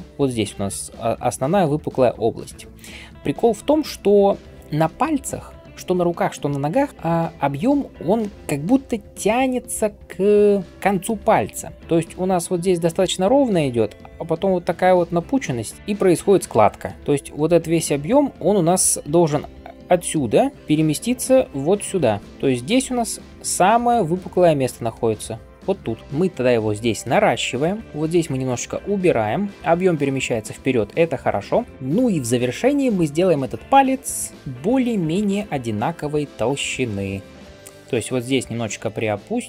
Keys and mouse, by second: 0.5-3.9 d, 1.6-3.1 right drag, 2.5 click, 2.5 middle click, 7.5-8.3 typing, 11.5-12.0 d, 15.5 d, 17.0-23.0 d, 18.2-19.5 drag, 18.2-19.5 middle drag, 18.2-19.5 right drag, 23.6 d, 24.2-26.0 d, 31.5-39.4 drag, 31.5-39.4 middle drag, 31.5-39.4 right drag.